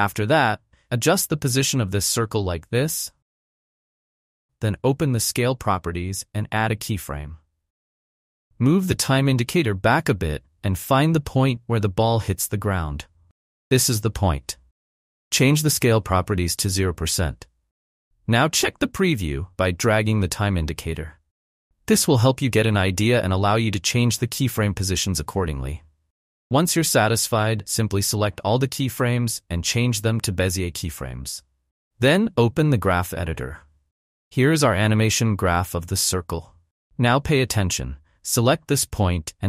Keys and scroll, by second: 2.0 shift+Up, 2.7 shift+Down, 17.0 0, 17.2 Return, 30.3 F9.